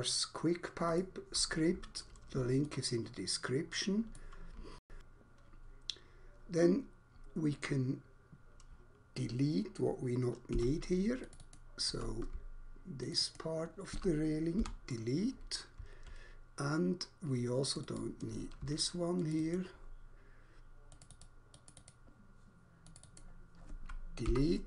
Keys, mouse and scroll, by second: 1.0 alt+click, 2.6 alt+click, 4.8 alt+shift+click, 7.2 scroll up 1, 10.4 3, 11.0 click, 11.5 double click, 13.0 shift+click, 13.4 shift+double click, 14.5 Delete, 17.7 click, 18.0 double click, 19.2 shift+click, 19.5 shift+double click, 20.8 shift+click, 21.2 shift+double click, 21.5 shift+click, 21.8 shift+double click, 22.7 shift+click, 23.2 shift+double click, 24.0 Delete.